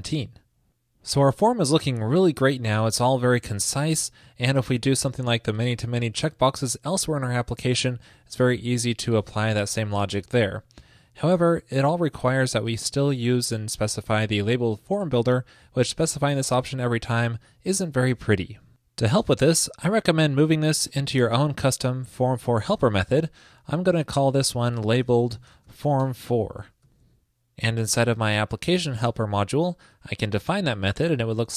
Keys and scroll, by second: 23.7 super+Left, 26.7 super+Right, 26.8 super+s, 30.5 super+v.